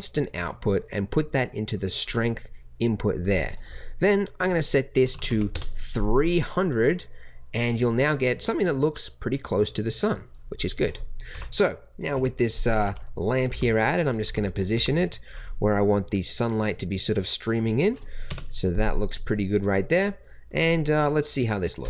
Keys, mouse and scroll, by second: 5.2 KP_0, 11.3-14.7 typing, 18.2 KP_0.